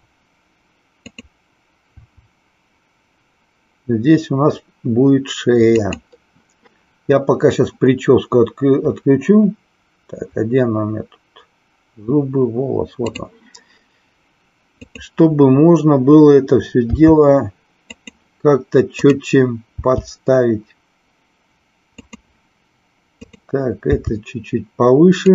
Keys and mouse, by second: 2.0 e, 5.9 click, 13.1 click, 14.7 click, 17.0 g, 17.9 click, 19.0 click, 22.0 click, 23.9 g.